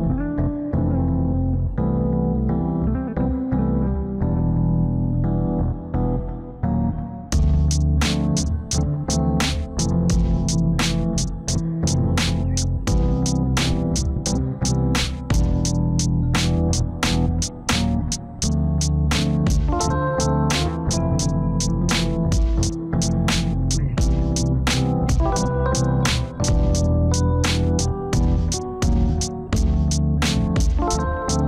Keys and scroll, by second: 3.1 alt+w.